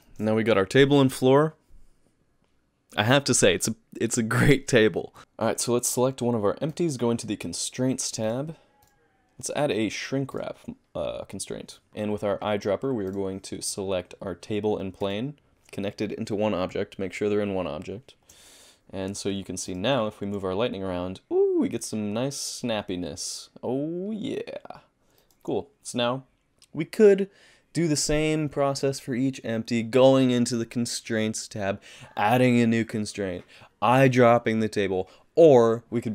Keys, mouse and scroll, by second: 0.0 shift+middle click, 5.2 click, 6.7 click.